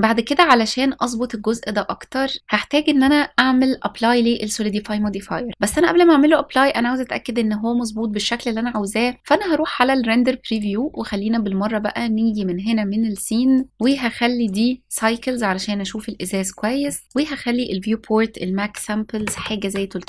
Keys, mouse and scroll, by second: 1.6-2.8 scroll down 3, 2.4 middle click, 2.4-2.8 scroll up 2, 9.2 click, 10.2-13.6 drag, 13.6 scroll up 1, 13.7 click, 17.0-19.2 drag, 18.9 KP_0.